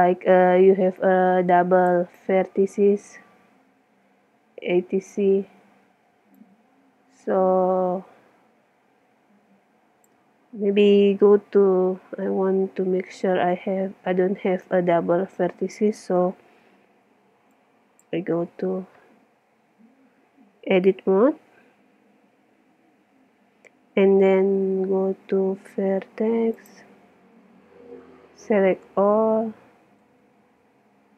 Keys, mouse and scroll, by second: 2.4-6.4 middle drag, 6.4-7.6 drag, 7.6 middle click, 7.7 click, 7.9 middle click, 10.4-15.2 middle drag, 17.6-19.1 drag, 18.5 Tab, 25.1 ctrl+Tab, 28.4 a, 29.4 a, 30.0 a.